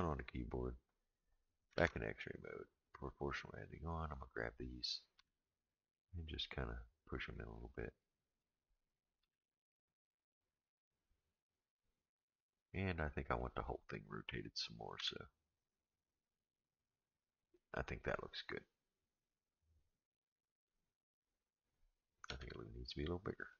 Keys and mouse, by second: 1.7 alt+z, 2.8 click, 4.0 click, 5.2 g, 8.0 click, 9.2 g, 13.5 click, 14.9 r, 22.3 s.